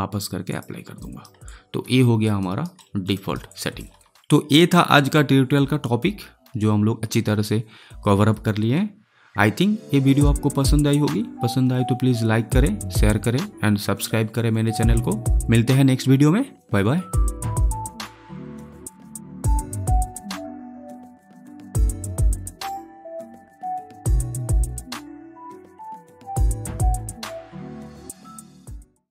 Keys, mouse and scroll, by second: 0.9 alt+right click, 1.4 alt+click, 2.3 alt+right click, 2.7 alt+middle click, 3.1 alt+right click, 3.4 alt+click.